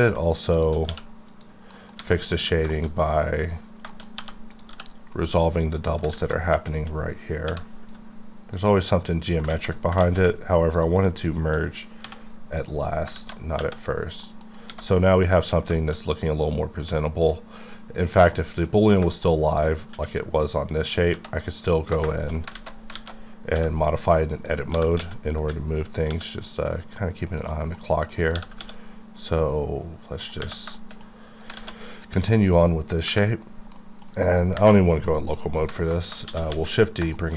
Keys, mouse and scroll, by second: 0.5 shift+click, 0.9 q, 1.3 click, 1.9 alt+middle click, 2.0 alt+a, 2.7 shift+middle click, 2.9-3.6 scroll up 5, 3.9 shift+middle click, 4.2 shift+1, 4.5 shift+click, 4.7 shift+g, 5.1 shift+right click, 5.4-6.0 shift+scroll up 6, 6.1 alt+z, 6.7 shift+click, 7.5 m, 7.9 click, 8.6 double click, 9.5 ctrl+z, 9.9 ctrl+z, 10.3 ctrl+z, 10.7 click, 11.0 shift+click, 12.9 scroll down 1, 13.1 alt+z, 13.5-14.6 scroll down 7, 14.2 middle click, 14.7 alt+a, 14.9 middle click, 15.6 scroll down 2, 15.7 shift+middle click, 18.3 middle click, 18.8 scroll down 2, 19.1 shift+middle click, 19.9 q, 20.4 click, 20.9 click, 21.3 middle click, 22.5 alt+z, 23.0 alt+a, 23.5 b, 24.0 click, 24.7 g, 25.0 x, 25.4 y, 26.1 x, 27.4 right click, 27.7 middle click, 28.2 middle click, 28.3 g, 28.6 x, 30.2 right click, 30.3 right click, 30.9 shift+middle click, 31.1 shift+middle click, 31.7 z, 32.0 click, 33.8 middle click, 35.1 scroll down 1, 35.4 middle click, 36.3 shift+d, 36.5 shift+z, 36.9 shift+click.